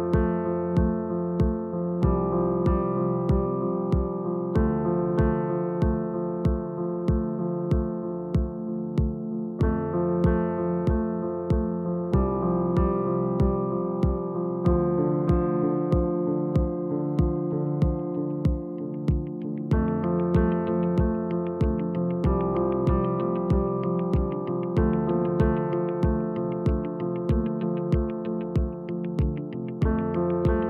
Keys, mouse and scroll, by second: 2.6 g, 5.1 Tab, 5.3 click, 7.4 click, 8.9 Tab, 10.0 g, 15.6 Tab, 17.7-19.7 drag, 24.3-25.9 scroll up 1, 25.9-28.9 drag, 29.2 click, 30.4 s.